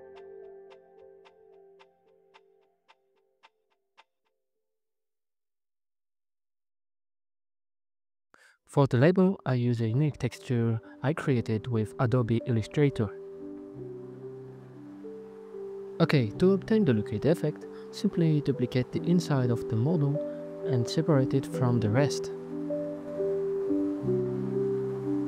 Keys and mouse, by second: 1.5 click, 1.9-3.2 drag, 4.8 right click, 5.6 click, 6.3 click, 8.1 a, 8.6 KP_Decimal, 9.3 ctrl+t, 11.2 click, 15.6 z, 16.3 z, 16.5 Tab, 17.9 KP_Divide, 19.7 alt+z, 20.5 right click, 21.8 alt+z, 23.0 alt+z, 23.8 ctrl+KP_Add, 24.0 ctrl+KP_Add, 24.1-24.8 ctrl+KP_Add, 25.1 ctrl+KP_Add.